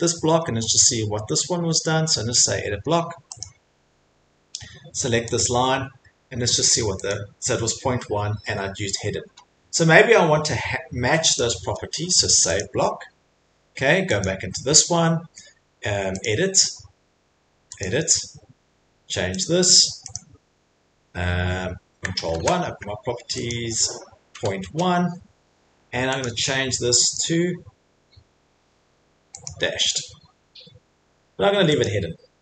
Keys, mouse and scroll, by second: 0.7 right click, 3.4 click, 7.1 click, 13.6 middle click, 14.2 click, 16.2 click, 17.8 click, 20.1 click, 22.3 ctrl+1, 23.5 click, 24.1-25.1 typing, 26.2 click, 27.1 click, 27.1 ., 29.4 click, 31.8 click.